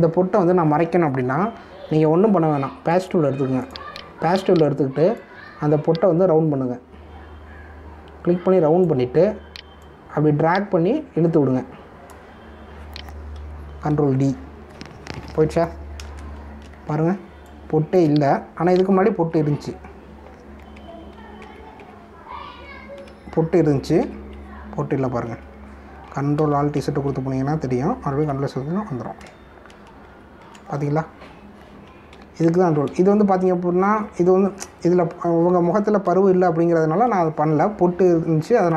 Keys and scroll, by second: 14.9 ctrl+d, 17.2 ctrl+=, 17.8 space, 20.2 ctrl+z, 21.7 ctrl+z, 22.4 ctrl+alt+z, 25.0 ctrl+z, 27.3 ctrl+alt+z, 29.1 ctrl+z, 30.6 ctrl+-, 33.4 ctrl+alt+z, 34.8 ctrl+d, 37.4 ctrl+=, 38.5 space.